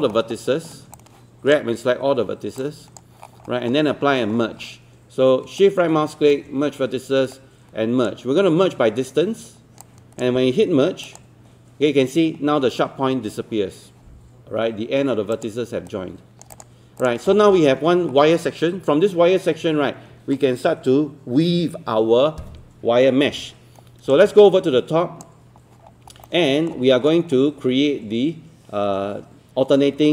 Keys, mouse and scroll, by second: 1.0-2.2 right drag, 3.1 click, 3.3-3.7 scroll up 1, 5.6-8.2 shift+right drag, 9.8 click, 15.9 right click, 16.5 click, 17.3-18.1 scroll down 1, 18.1-18.5 scroll up 1, 18.5-18.9 scroll down 1, 18.9-22.2 scroll up 1, 24.2-25.8 drag, 26.3 alt+middle click, 26.8 scroll up 1, 29.9 scroll down 1.